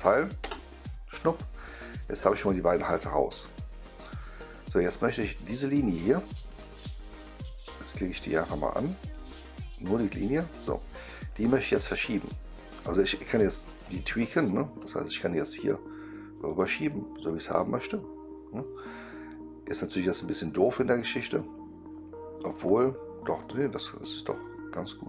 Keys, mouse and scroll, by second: 0.4 Return, 1.2-4.2 right drag, 6.4 click, 7.1-7.6 right drag, 7.9-8.3 right drag, 9.8 click, 11.2 click, 13.7 click, 14.7-15.6 right drag, 16.5-22.5 drag, 23.3-25.0 drag.